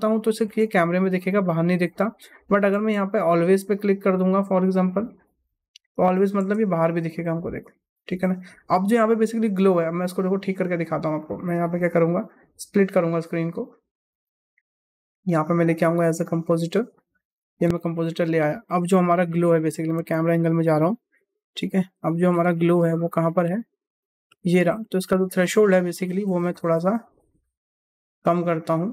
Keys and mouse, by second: 0.4 KP_0, 1.1-2.0 middle drag, 2.6 KP_0, 5.1-6.2 drag, 6.3 KP_0, 6.8 middle drag, 10.9 click, 13.0 click, 13.8 click, 14.9-17.3 drag, 18.1 middle click, 19.9 KP_0, 21.6 middle click, 22.7 middle click, 23.4 middle click, 23.9 middle click, 25.1 middle click, 26.5 click, 27.3 click, 27.9 click, 28.5 click.